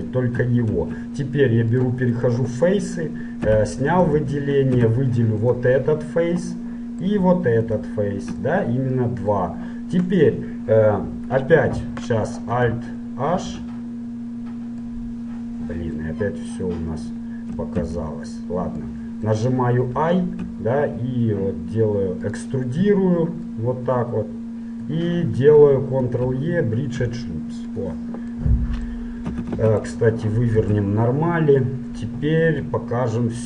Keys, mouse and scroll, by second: 0.8 ctrl+Tab, 2.2-3.9 drag, 3.7 a, 3.9 middle click, 4.5 middle click, 4.9 z, 5.6-6.8 right drag, 6.8 middle click, 7.6-8.6 middle drag, 8.6 click, 8.9 middle click, 9.0 click, 9.2 right click, 9.5 middle click, 9.6 right click, 13.4 alt+h, 15.0-16.9 middle drag, 17.8 ctrl+z, 19.0-21.0 middle drag, 23.7-24.8 middle drag, 26.1 ctrl+e, 29.5 a, 29.8 a, 30.7 ctrl+n.